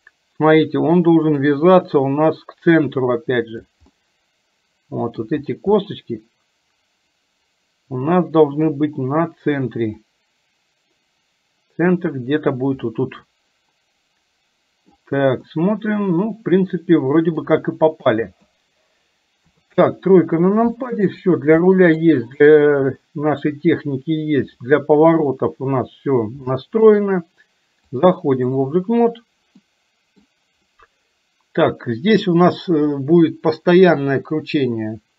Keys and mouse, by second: 1.6-3.8 drag, 4.0-5.1 middle drag, 5.9-8.8 middle drag, 10.0-12.5 drag, 13.0-15.0 middle drag, 15.5-17.5 middle drag, 18.0 KP_1, 19.5 KP_3, 20.8 shift+middle click, 21.8 middle click, 23.0 shift+middle click, 24.6 middle click, 26.5 middle click, 28.1 click, 29.6 middle click.